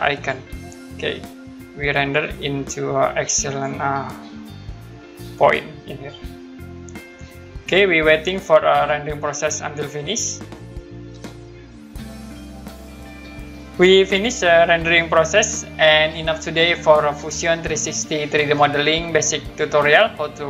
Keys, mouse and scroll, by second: 0.1 click, 2.7 click.